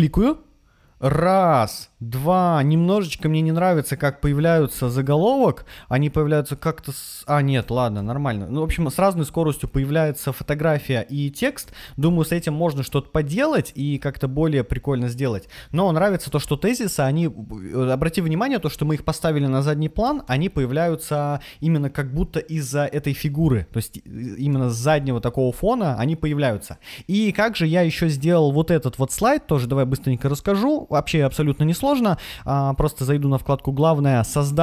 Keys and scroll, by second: 4.1 Left, 7.4 Left, 7.9 Right, 11.6 Left, 11.9 Right, 15.8 Left, 19.9 Left, 20.2 Right, 24.4 Left.